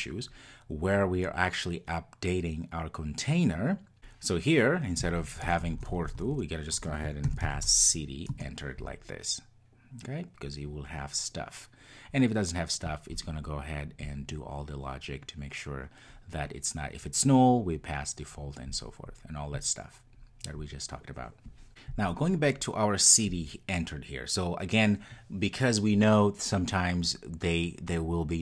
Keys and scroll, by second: 8.3 Return.